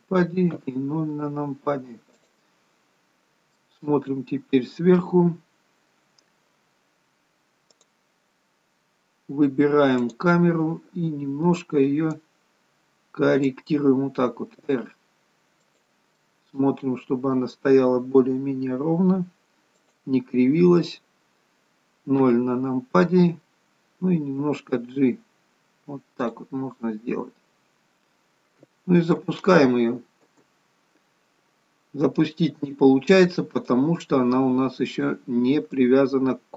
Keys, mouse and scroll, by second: 0.6 KP_0, 1.6-2.0 scroll down 3, 2.3 click, 2.9-4.1 scroll down 3, 3.6 middle click, 10.0 click, 12.2 click, 14.5 r, 16.2 middle click, 17.9 r, 22.2 KP_0, 24.4 g, 29.2 space, 30.5 space, 33.7 click, 35.9 click.